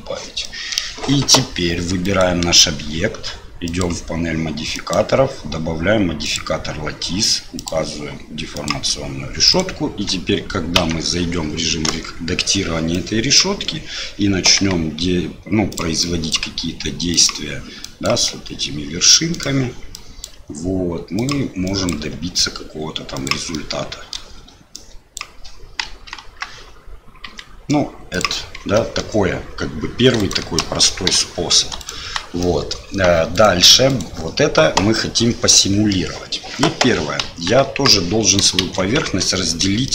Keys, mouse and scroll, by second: 0.4 middle click, 2.0 click, 3.6 click, 4.8-6.3 drag, 7.5 click, 9.5 click, 10.7 Tab, 11.8 KP_1, 12.9 click, 14.5 g, 16.0 click, 16.4 g, 17.9 click, 19.3 g, 19.9 click, 20.3 g, 21.6 click, 22.0 g, 23.6 middle click, 24.8 click, 25.8 KP_1, 26.1 KP_3, 27.3 g, 28.6 Tab, 28.7 click, 30.2 click, 31.1 Delete, 31.8 click, 32.0 Delete, 32.4 middle click, 33.3 click, 33.9 click, 35.0 middle click, 37.2 KP_1, 37.6 KP_3, 38.6 shift+z, 39.0 Tab, 39.8 shift+middle click.